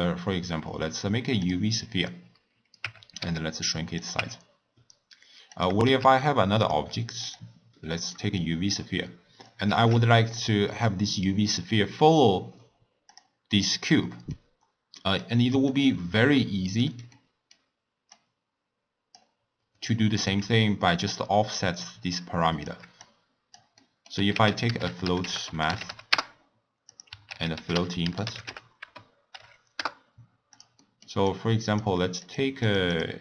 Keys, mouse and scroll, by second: 2.8 Tab, 3.2 s, 4.2 Tab, 5.5 click, 6.0 shift+d, 7.2 drag, 8.1 middle click, 8.7 click, 9.8 shift+d, 13.1 click, 14.1 middle click, 14.4-15.0 scroll down 1, 15.0-15.6 middle drag, 15.6 click, 17.1-18.1 middle drag, 18.1 drag, 19.9 middle click, 20.6-23.8 shift+drag, 23.8 middle click, 24.3 ctrl+a, 27.2 ctrl+a, 30.7 middle click, 31.2-32.7 drag, 32.9-33.2 drag.